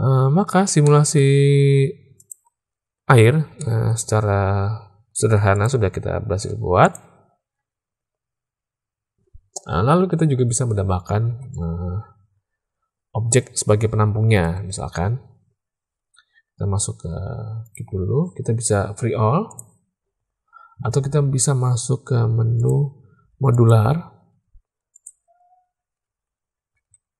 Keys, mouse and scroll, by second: 0.3 alt+a, 0.8 click, 2.1 click, 3.5 shift+drag, 5.4 click, 6.7 click, 11.2 alt+a, 14.5 space, 17.6 click, 19.8 click, 22.5-23.7 drag, 24.2 z, 26.7 alt+a.